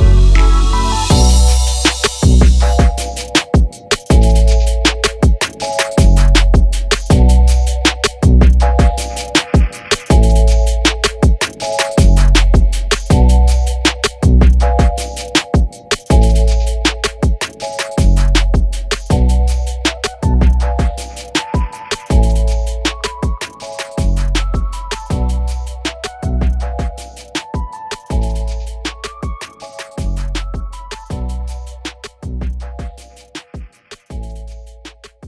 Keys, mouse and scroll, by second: 0.3 click, 6.4 ctrl+shift+g, 7.5 click, 9.3 right click, 9.4 right click, 9.7 right click, 11.9-13.7 drag, 15.9 ctrl+g, 17.4 click, 19.1 Up, 19.3 Up, 19.5 Up, 19.7 Up, 19.8 Up, 20.0 Up, 20.2 Up, 20.3 Up, 21.9 click, 24.7 Up, 25.1 Up, 25.2 Up, 25.3 Up, 25.7 Up, 25.9 Up, 26.0 Up, 28.8-35.2 drag.